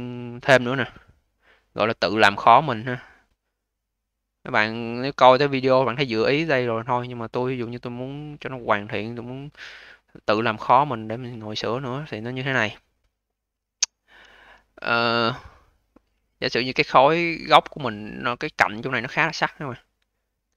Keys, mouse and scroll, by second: 0.2-1.3 scroll up 2, 2.0-2.5 scroll up 2, 2.5-3.4 scroll up 1, 3.4-3.9 scroll up 4, 3.9-4.5 scroll down 1, 4.5-5.5 scroll down 11, 5.5-5.9 alt+middle drag, 5.9-6.4 alt+drag, 6.4-7.6 scroll up 8, 7.6-8.1 alt+middle drag, 8.1-9.3 alt+drag, 9.3-9.8 scroll up 5, 9.8-12.8 alt+drag, 12.8-13.7 scroll down 10, 13.7-14.2 alt+middle drag, 14.2-14.6 scroll down 4, 14.6 alt+middle click, 15.0-16.1 scroll up 10, 16.1-16.8 alt+drag, 16.8-17.4 scroll up 1, 17.4-18.3 scroll down 3, 18.3-20.0 scroll up 3, 20.0-20.5 scroll up 1.